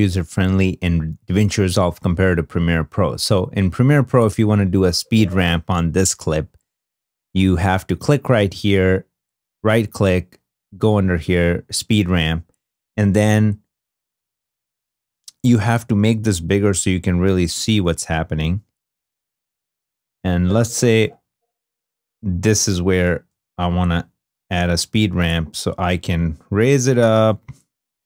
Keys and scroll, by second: 2.2 super+Tab, 14.1 =, 18.8 -.